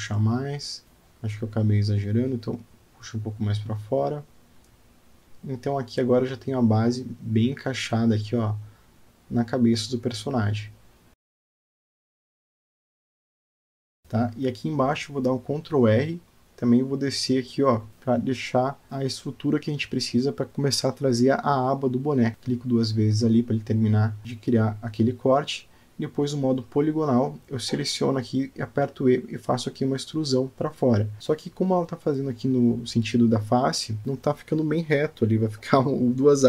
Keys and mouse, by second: 0.7 g, 2.0 click, 2.1 g, 3.6 click, 3.7 g, 5.6 Tab, 6.0-7.2 middle drag, 7.3 Tab, 7.8 click, 8.5 g, 9.6 Tab, 10.2-10.7 alt+middle drag, 11.1-14.0 middle drag, 14.0 Tab, 16.5 ctrl+r, 22.3 Tab, 29.0 click, 29.9 e, 33.2 middle click.